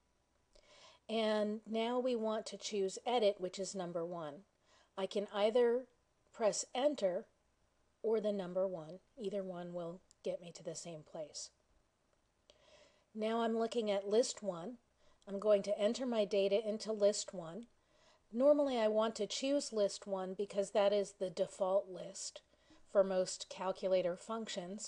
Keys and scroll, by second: 7.9 1.